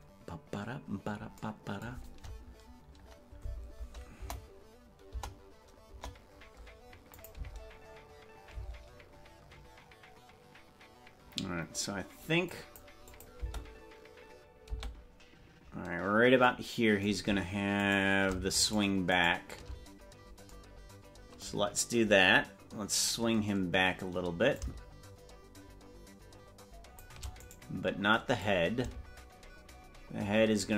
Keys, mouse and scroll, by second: 4.2 KP_0, 5.2 KP_0, 6.0 KP_0, 7.3-9.0 drag, 7.6 space, 8.8 space, 12.7 click, 13.2 click, 13.6 space, 15.0 space, 18.0 right click, 19.0 shift+right click, 19.4 right click, 24.6-27.1 shift+drag, 27.6 right click, 28.4-30.7 drag.